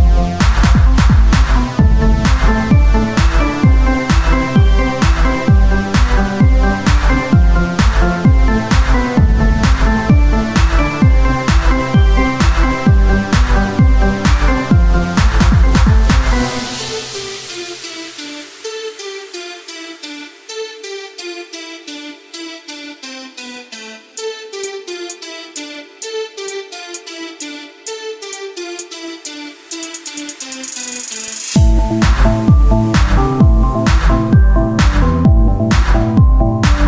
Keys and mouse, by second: 0.4 e, 2.7 KP_1, 2.9 KP_3, 3.3 z, 4.2 e, 5.7 s, 6.7-7.9 drag, 8.0 e, 9.3 s, 11.7 KP_3, 12.5 e, 14.6 s, 15.2 z, 16.1 ctrl+z, 17.1 s, 18.3 Tab, 20.1-23.7 drag, 24.0 Tab, 24.5 z, 25.8 z, 26.3 z, 26.8 z, 26.8 s, 27.8 Tab, 28.9 ctrl+z, 29.7 Tab, 29.7 ctrl+z, 31.7 Tab, 33.5 Tab, 34.5-35.8 drag, 36.2 KP_1.